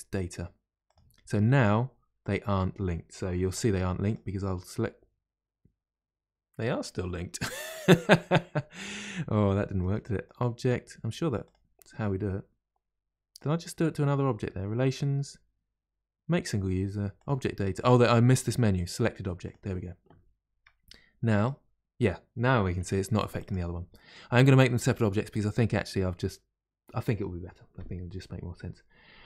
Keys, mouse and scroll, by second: 1.4-29.2 middle drag.